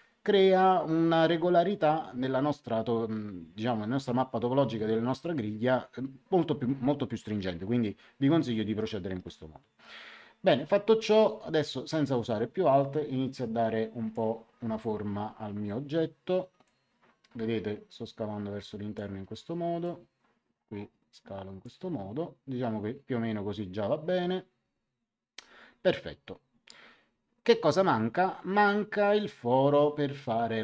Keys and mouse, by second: 12.2 click, 16.6 click, 19.8 click.